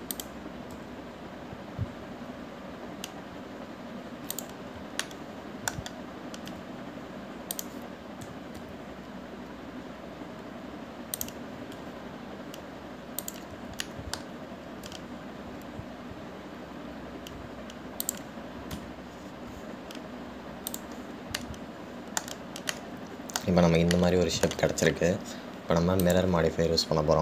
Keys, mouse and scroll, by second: 6.2-7.7 shift+middle drag, 7.7 e, 15.1-16.2 shift+middle drag, 16.2 e, 20.4-21.9 scroll down 1, 21.9 click, 22.6-27.2 middle drag.